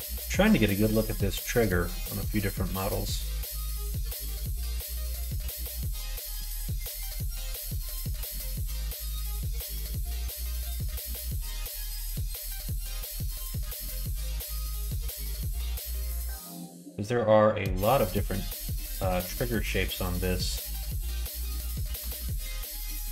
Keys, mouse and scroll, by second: 5.5 middle click, 8.2 middle click.